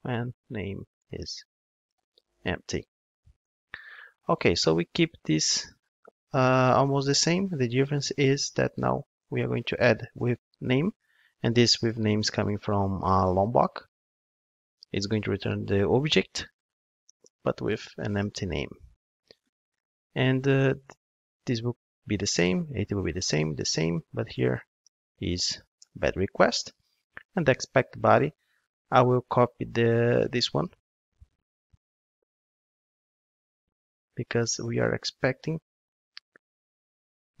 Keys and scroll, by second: 9.9 Return, 11.8 super+b, 14.2 ctrl+Tab, 25.8 Return, 30.5 super+c, 32.5 super+v.